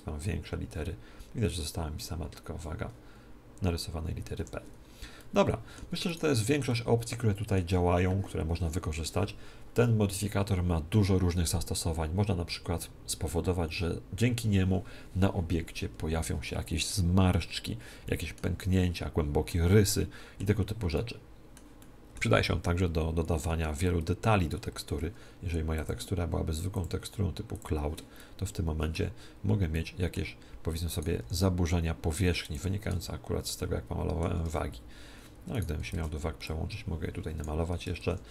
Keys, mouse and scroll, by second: 4.7-8.5 middle drag, 6.0-7.8 right drag, 17.9-24.1 middle drag, 25.7-28.5 drag, 28.1-31.4 middle drag, 30.8-32.5 right drag, 31.1 s, 32.5-34.1 drag, 33.5-35.5 middle drag, 34.3 ctrl+Tab, 35.5-37.2 right drag, 35.9 ctrl+Tab, 36.3-38.2 drag, 38.1 ctrl+Tab.